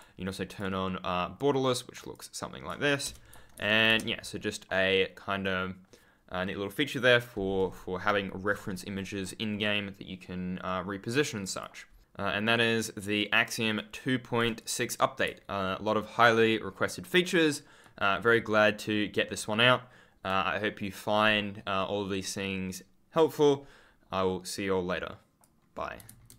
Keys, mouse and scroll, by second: 3.2 w, 5.3 click, 11.3 click, 12.0 ctrl+click, 13.4 ctrl+scroll up 1, 13.7 ctrl+click, 14.5 click, 15.5 ctrl+scroll up 1, 17.7 ctrl+click, 18.4 scroll up 1, 19.3 click, 19.4 ctrl+click, 21.0-21.3 scroll up 1, 21.7 click.